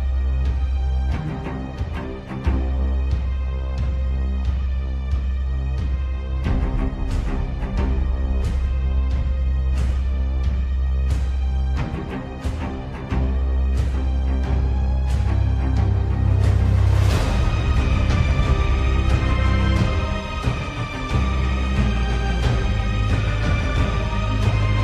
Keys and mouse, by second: 6.0 middle click, 7.5 3, 10.0 KP_7, 12.0 e, 21.0 ctrl+z.